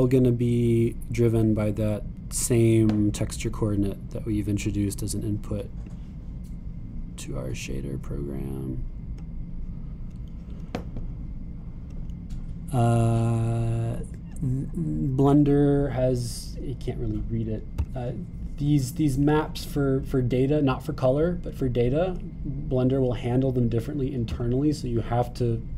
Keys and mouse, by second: 5.7-12.4 drag, 12.4 middle click.